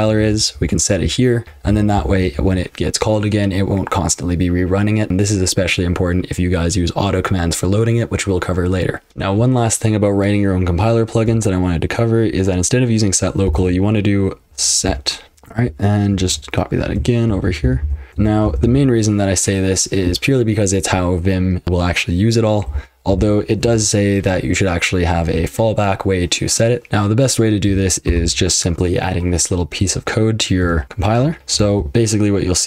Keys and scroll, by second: 0.0-2.8 typing, 0.2 ctrl+[, 9.1 Return, 9.1 super+l, 9.1 ctrl+[, 9.1 F12, 9.1 typing, 13.2-17.0 typing, 17.2 ctrl+y, 17.4 ctrl+y, 17.6 ctrl+y, 17.8 ctrl+y, 18.1 ctrl+y, 18.1 ctrl+[, 18.4 k, 18.6 k, 22.7 k, 23.1 o, 23.6 Return, 26.9 super+h, 26.9 F12, 26.9 super+l, 26.9 BackSpace, 28.1 alt+v, 29.8-32.6 typing.